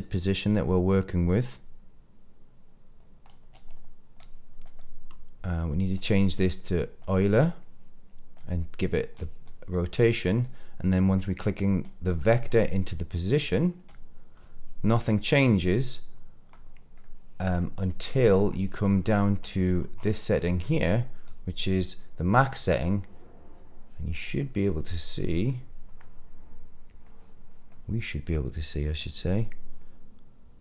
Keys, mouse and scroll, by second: 4.5 click, 5.9-7.1 drag, 8.3 click, 8.4-9.1 drag, 9.4 middle click, 10.3 click, 11.8 click, 11.9-14.0 drag, 16.5 middle click, 16.9-17.6 middle drag, 18.4 middle click, 19.1 scroll down 2, 19.4 middle click, 19.9-20.6 scroll up 3, 20.6 middle click, 22.3-24.3 drag, 24.7-25.0 scroll down 2, 25.0 middle click, 25.6-25.9 scroll down 2, 25.9-27.0 middle drag, 27.6-29.1 drag, 29.3-30.6 middle drag.